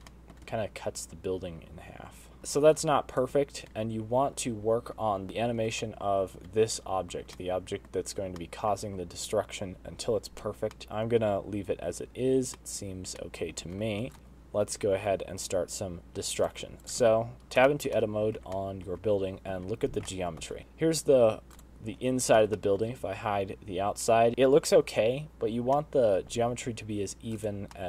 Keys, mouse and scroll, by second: 0.4 middle click, 0.8 shift+right click, 1.4 space, 2.4 middle click, 2.9 space, 3.6 shift+right click, 6.7 middle click, 8.2 middle click, 9.2 shift+middle click, 10.8 middle click, 10.8 space, 11.2 middle click, 11.5 space, 13.4 middle click, 14.0 middle click, 14.1 shift+right click, 17.7 click, 17.9 Tab, 18.1-18.5 scroll up 3, 18.6 shift+middle click, 18.9 middle click, 19.3 alt+a, 19.4 middle click, 20.5 l, 20.7 middle click, 20.7 g, 23.4 middle click, 23.4 h, 24.3 alt+a, 24.3 l, 24.3 g, 24.9 middle click, 26.7 middle click, 27.4 g.